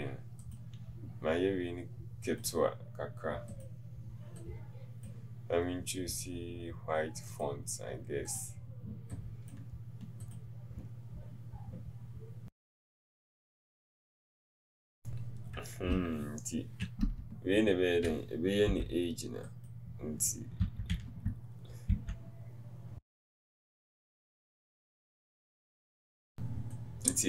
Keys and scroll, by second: 24.6 Left, 25.7 shift+a.